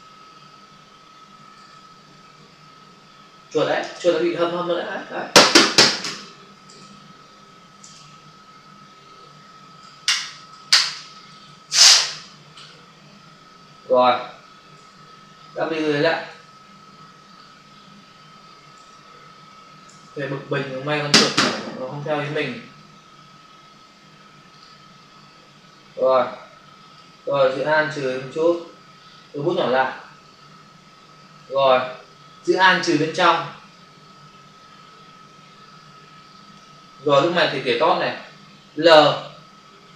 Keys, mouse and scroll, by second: 4.2 ctrl+alt+z, 5.4 right click, 6.6 ctrl+alt+z, 13.5 ctrl+alt+z, 15.6 click, 15.7 click, 18.8 ctrl+alt+z, 19.8 ctrl+alt+z, 22.6 ctrl+alt+z, 24.4 click, 24.5 click, 26.1 click, 27.6 alt+click, 29.4 typing, 30.2 click, 32.9 alt+click.